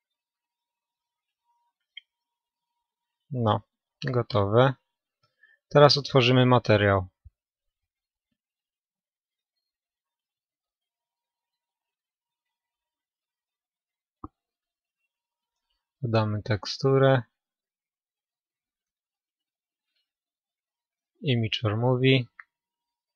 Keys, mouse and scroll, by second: 0.8-2.9 middle drag, 3.0 middle click, 3.3 middle click, 4.1-4.5 scroll down 1, 4.5-11.6 middle drag, 11.6-21.5 drag.